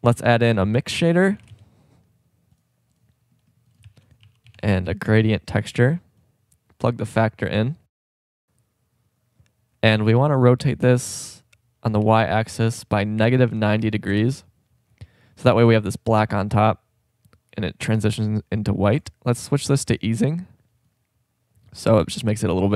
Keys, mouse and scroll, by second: 0.4 shift+a, 3.9 shift+a, 4.0-5.5 drag, 10.8 r, 12.0 click, 16.1-18.3 drag, 21.0-22.2 drag.